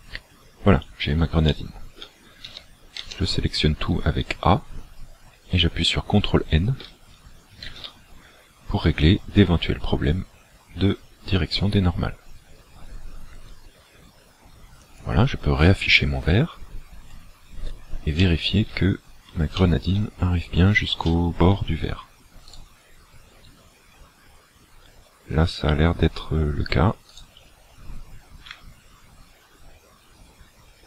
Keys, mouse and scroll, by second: 0.2 scroll down 2, 1.5 shift+middle click, 2.5 a, 3.0 a, 7.6 ctrl+n, 14.8 click, 17.0-17.4 scroll up 3, 18.2 shift+middle click, 19.0 scroll up 2, 19.6 shift+middle click, 20.2-20.6 scroll up 2, 21.0 shift+middle click, 22.5 right click, 23.4-23.9 scroll up 2, 27.1 alt+right click, 28.6 g.